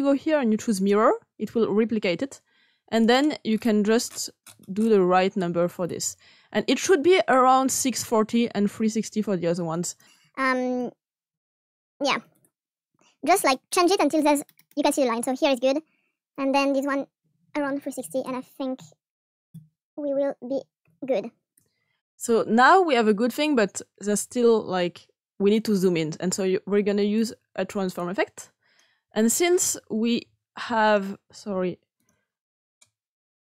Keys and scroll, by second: 11.8 typing, 12.3 Return, 13.2 typing, 14.9 typing, 17.2-18.1 typing, 19.6-20.8 typing, 21.5 Return.